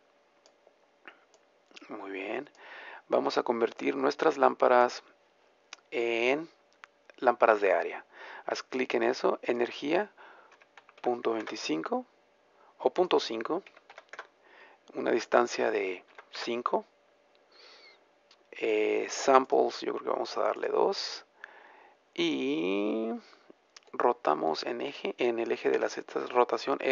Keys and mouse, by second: 1.4-24.1 drag, 24.1-25.8 middle drag, 25.8 r.